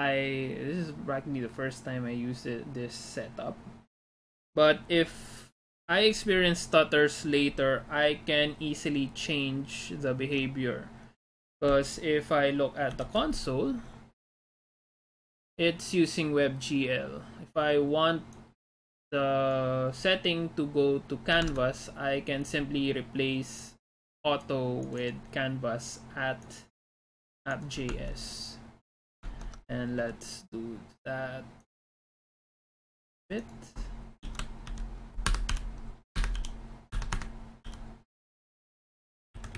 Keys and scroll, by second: 21.7 alt+Tab, 28.0 alt+Tab, 29.8 alt+Tab, 35.2-35.9 typing, 36.2 Escape, 36.9 Escape, 37.2 Escape, 37.7 u, 39.2 c, 39.4 Left.